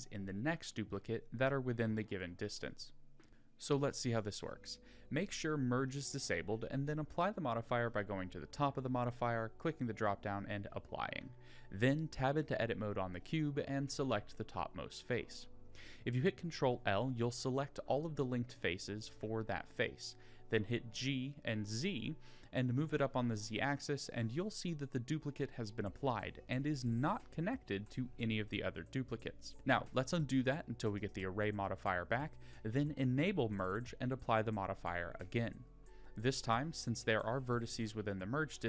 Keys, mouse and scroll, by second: 3.2 middle click, 3.6 Tab, 6.8 click, 7.6-11.3 drag, 12.7 Tab, 13.5 click, 17.8 ctrl+l, 18.1 ctrl+;, 18.8 g, 22.3 middle click, 29.5 ctrl+z, 29.7 ctrl+z, 31.2 ctrl+z, 33.5 click, 35.1-35.7 drag, 35.7 Tab, 36.2 click, 38.1 ctrl+l.